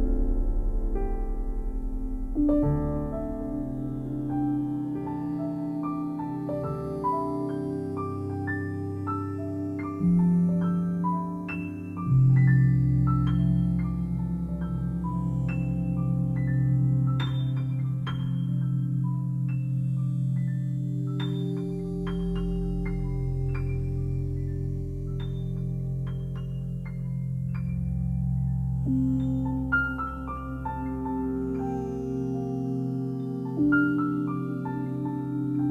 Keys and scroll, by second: 10.5 1, 12.0 1, 15.0 Return.